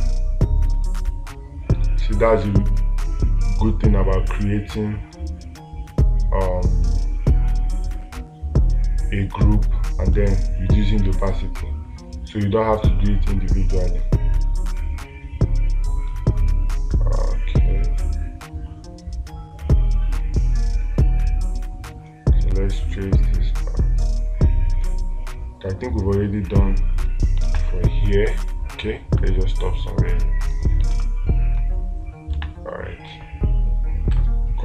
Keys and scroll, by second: 27.9 space, 31.4 space.